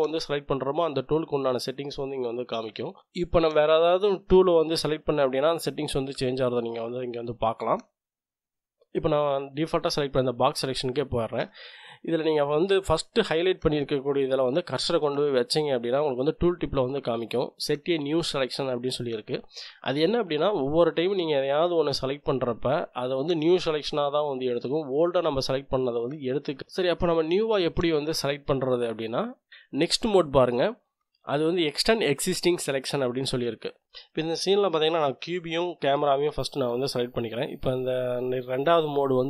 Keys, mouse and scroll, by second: 3.0 click, 4.9 click, 9.3 click, 19.9 click, 20.5 click, 21.9-23.7 drag, 24.2-25.6 drag, 26.2 click, 34.1-36.4 drag.